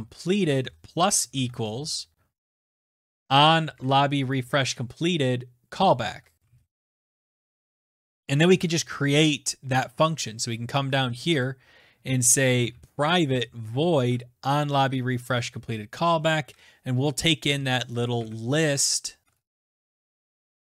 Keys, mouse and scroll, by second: 0.4-2.2 typing, 3.1 click, 3.2 click, 4.0 ctrl+c, 4.5 click, 4.6 ctrl+v, 6.0-7.5 typing, 8.1 click, 8.2 click, 8.7 ctrl+c, 9.5 click, 11.1 Return, 11.5 Tab, 12.1-14.2 typing, 15.5-20.7 typing, 16.5 Left, 18.9 Tab.